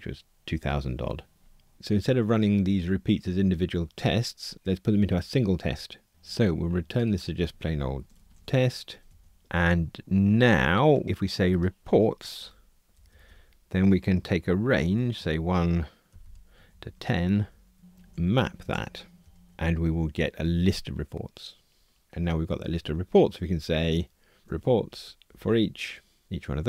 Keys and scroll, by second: 26.2 Return.